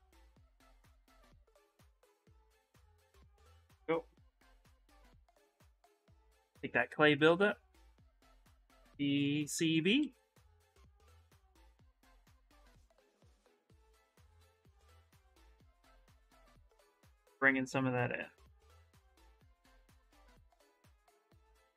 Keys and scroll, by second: 0.3 shift+x, 5.7-6.9 typing, 8.2 shift+b, 8.6 shift+c, 9.2 shift+b, 9.8 shift+s, 12.6 shift+s.